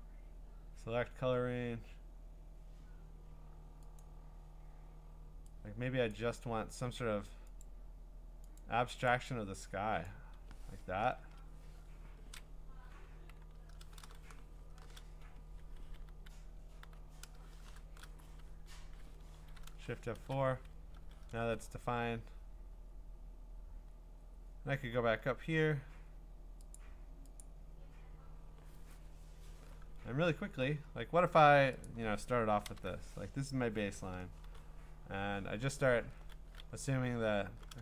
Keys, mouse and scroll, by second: 4.0 click, 6.1 click, 7.6 click, 8.6 click, 9.1 click, 10.1 click, 11.2 Return, 14.5 F5, 15.4 Escape, 16.1-16.8 typing, 17.8 F5, 19.3 Escape, 20.0 F4, 21.4 ctrl+Tab, 22.9-24.8 scroll, 25.2-26.8 scroll, 26.8 click, 27.4 click, 30.2-30.7 scroll, 31.9 click, 32.7 alt+BackSpace, 34.4 x.